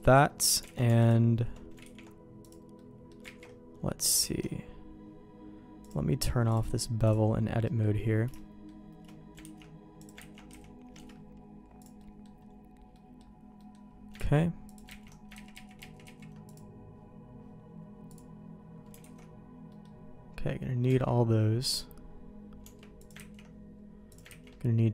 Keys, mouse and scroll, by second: 0.6 alt+a, 0.9 alt+click, 1.8 ctrl+e, 2.7 middle click, 3.2 ctrl+z, 4.3 alt+a, 5.8 click, 6.4 click, 7.6 middle click, 8.3 shift+middle click, 9.4 ctrl+x, 9.9 click, 10.1 ctrl+x, 10.4 a, 10.9 Escape, 11.7 click, 11.9 middle click, 12.9 middle click, 13.5 middle click, 14.1 ctrl+x, 14.6 click, 15.0 ctrl+x, 15.5 ctrl+z, 15.7 ctrl+z, 16.0 ctrl+z, 16.4-17.5 drag, 18.0 click, 19.0 alt+a, 19.6 middle click, 20.8 Tab, 22.6 Tab, 22.9 click, 23.3 ctrl+x, 24.0 click, 24.2 ctrl+x.